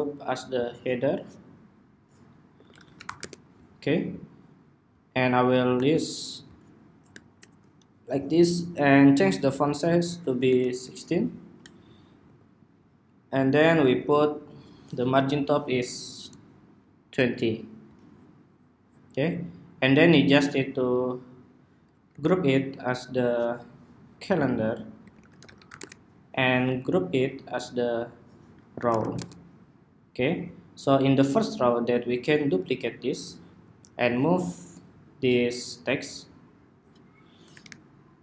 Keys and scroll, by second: 7.5 ↺, 21.8 super+g, 26.5 super+g, 32.7 super+d.